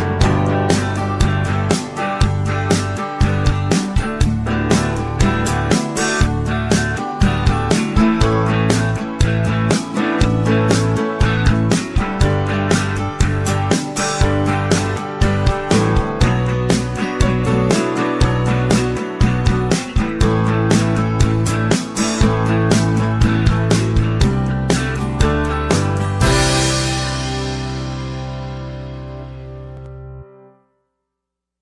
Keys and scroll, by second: 23.7-25.0 typing.